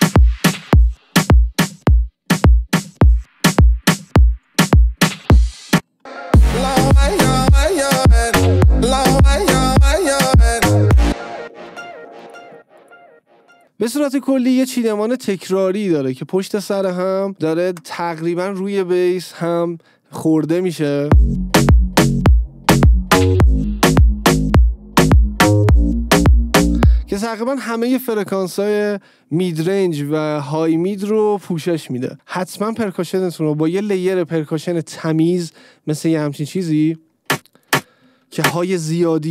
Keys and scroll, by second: 5.8 space, 11.2 space, 21.2 space, 27.2 space, 36.9 space, 38.6 space.